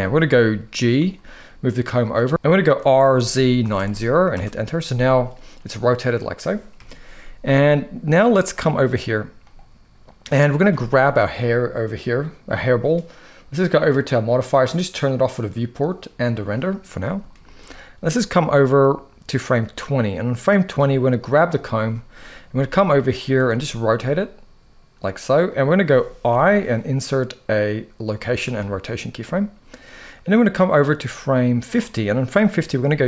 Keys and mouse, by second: 0.7 g, 1.8 click, 2.3-3.4 typing, 4.0 Return, 5.0-6.1 middle drag, 6.5 KP_1, 8.2 click, 9.1-9.9 drag, 13.7 click, 14.7 click, 15.9 click, 17.0 shift+middle click, 17.9-20.5 drag, 21.1-21.6 drag, 21.7 shift+middle click, 22.2 g, 22.9 click, 23.2 r, 26.0 i, 29.8-31.4 drag, 32.5 g.